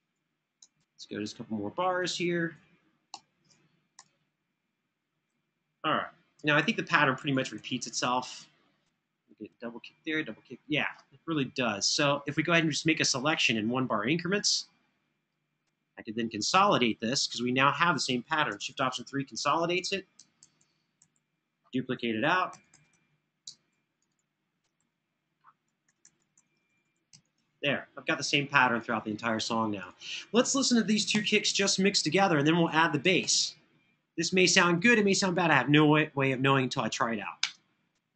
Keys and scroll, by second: 2.8 Right, 6.3 super+[, 6.6 super+[, 18.5 3, 20.2 super+[, 20.8 super+[, 22.3 super+d, 22.5 super+d, 24.6 super+[, 25.6 super+d, 25.8 super+d, 30.9 BackSpace, 33.1 super+=, 37.2 space.